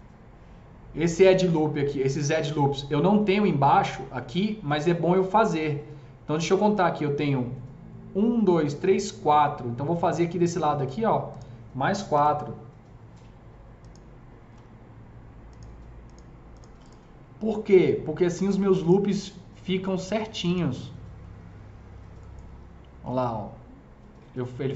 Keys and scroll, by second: 12.1 KP_0.